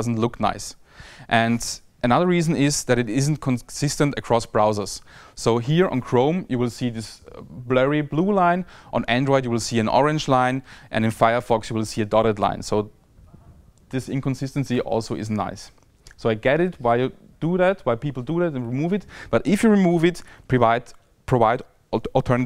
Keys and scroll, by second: 0.0 Tab, 0.8 Tab, 1.7 Tab, 2.7 Tab, 3.6 Tab, 6.6 Tab, 7.4 shift+Tab, 8.0 Tab, 8.8 Tab, 9.2 Tab, 9.7 Tab, 10.2 Tab, 10.7 Tab, 11.6 Tab.